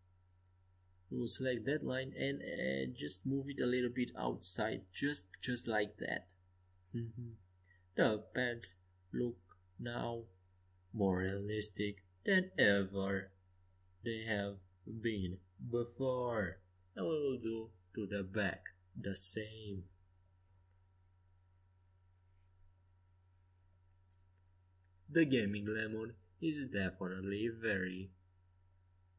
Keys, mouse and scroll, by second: 2.3-3.3 right drag, 3.3-5.0 middle drag, 4.5 click, 4.5-5.6 right drag, 5.6 click, 6.0-7.8 middle drag, 8.9-11.8 right drag, 9.8-11.6 drag, 11.3-21.0 middle drag, 21.6-23.5 drag, 23.5 middle click, 28.1-29.1 right drag.